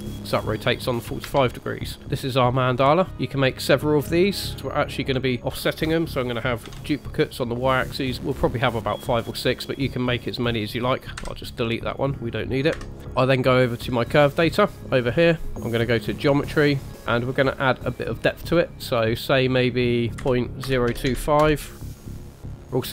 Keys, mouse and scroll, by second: 1.3 Tab, 4.5 middle click, 4.8 middle click, 5.3 shift+middle click, 6.7 shift+d, 11.2 Delete, 11.8 click, 12.7 KP_1, 14.7 click, 16.2 click, 16.7-18.2 scroll down 3, 18.2-19.1 scroll down 1, 19.1 click, 20.1 click, 22.4 click, 22.6 shift+middle click.